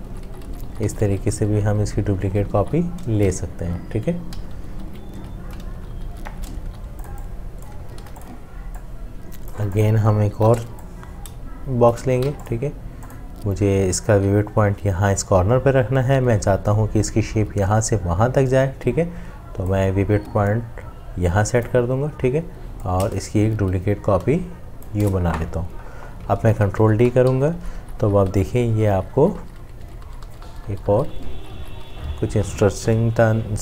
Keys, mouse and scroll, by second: 4.3 ctrl+z, 5.7 ctrl+shift+z, 6.7 v, 8.0 ctrl+g, 10.4 m, 11.4 shift+click, 12.0-12.7 typing, 22.9 alt+click, 26.5 ctrl+d, 26.6 click.